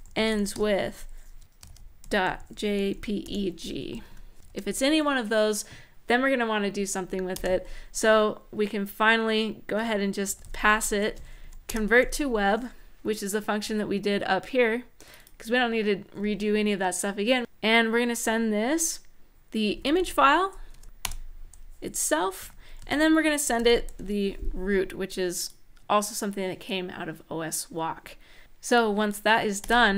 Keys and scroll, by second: 0.0-4.4 typing, 3.7 End, 3.8 End, 7.1 Return, 9.8-10.8 typing, 11.2 Down, 11.4 Return, 19.2-20.8 typing, 20.8 Return, 22.1-24.1 typing, 29.4 super+s.